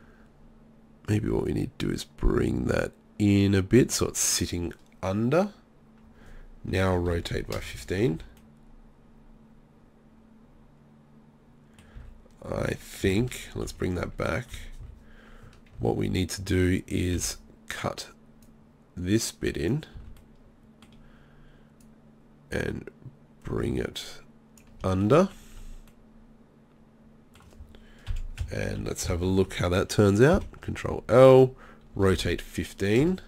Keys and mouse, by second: 3.1 click, 6.8 r, 7.7 z, 8.1 z, 12.0 z, 13.2 ctrl+z, 13.6-15.8 typing, 17.2 b, 18.4-19.7 drag, 19.9 z, 28.1 KP_3, 28.4 KP_1, 28.8 KP_3, 29.1 ctrl+KP_1, 30.3 ctrl+l, 31.9 r.